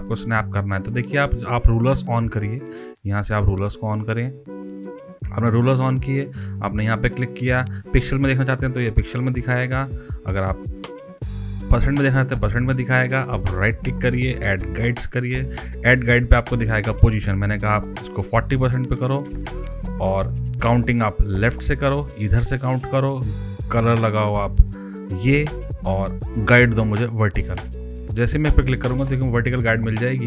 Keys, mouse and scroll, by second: 3.1 click, 6.3 right click, 7.8 click, 9.9 right click, 10.9 click, 13.6 right click, 14.7 click, 18.0 click, 18.9 click, 19.2-19.8 typing, 21.3 click, 27.8 click.